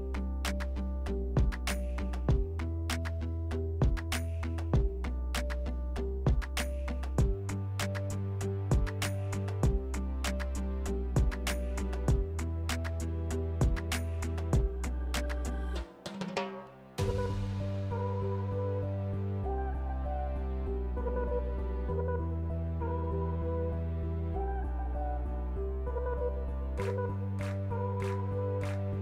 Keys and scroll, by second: 12.8 s, 19.9 2, 24.5 4, 26.2-27.7 typing.